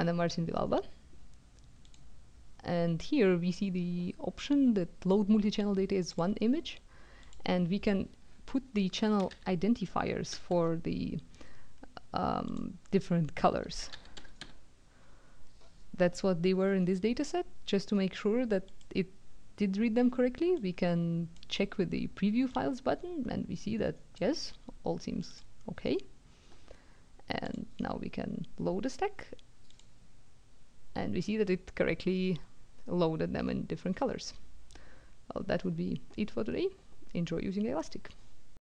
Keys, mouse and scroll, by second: 1.9 click, 6.1 click, 7.2 click, 9.2 c, 10.3 o, 12.5 click, 13.6-14.8 typing, 18.7 click, 20.5 click, 22.5-24.6 drag, 25.3 click, 27.5 click, 29.7 click, 31.8-32.7 scroll up 1, 32.7 scroll up 1, 33.9-34.4 scroll down 1, 38.6 click.